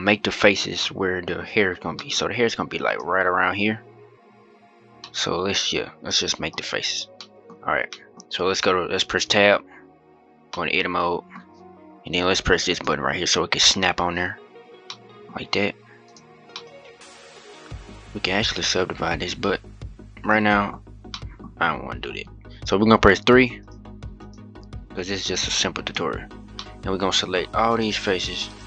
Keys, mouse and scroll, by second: 0.1-0.5 scroll up 1, 0.5-2.6 middle drag, 2.6-3.3 drag, 4.7-6.3 middle drag, 6.3 scroll up 2, 6.7 scroll down 1, 6.9-9.0 middle drag, 9.0 Tab, 9.9-10.2 scroll down 1, 10.2 middle click, 11.1-12.4 scroll down 1, 12.4 click, 14.6 middle click, 15.0-15.8 scroll up 1, 15.8 click, 16.2-19.3 middle drag, 20.6 scroll up 2, 20.9 middle click, 21.2 scroll up 1, 22.9 3, 23.3 click, 23.9 click, 25.6 shift+click, 26.3-27.5 middle drag, 27.5 shift+click.